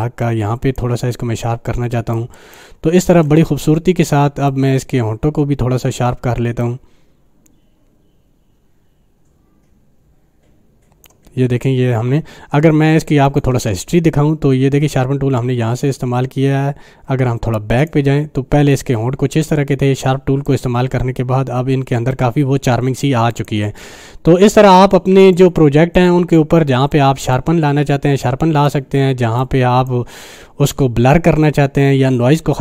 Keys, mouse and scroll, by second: 1.2-2.4 click, 2.4 space, 2.5-3.1 click, 2.9 space, 4.5-9.1 drag, 17.8 click, 20.5 click, 23.3 click, 25.3 right click, 25.3 right click, 25.9-27.5 drag, 29.6-30.0 drag.